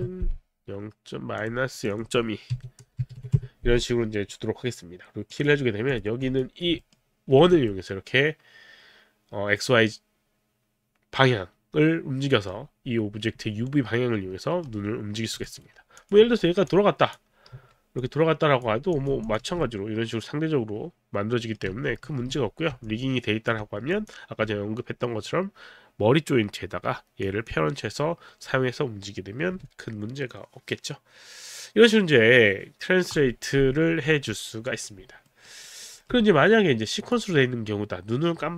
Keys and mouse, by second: 0.0 Return, 1.4 click, 1.7 click, 2.5 KP_Subtract, 2.8 KP_0, 3.2 KP_2, 3.2 KP_Decimal, 3.4 Return, 4.0 Return, 5.3 click, 5.9 click, 6.8 alt+middle click, 7.4 w, 8.4 middle click, 13.5 middle click, 15.4 alt+right click, 16.0 click, 16.3 click, 16.3 e, 18.0 click, 18.5 click, 19.1 click, 19.5 w, 19.6 middle click, 21.6 z, 22.1 z, 23.1 alt+z, 23.1 alt+click, 23.9 click, 27.2 click, 35.3 alt+middle click, 35.7 alt+right click, 35.7 alt+middle click, 37.0 click.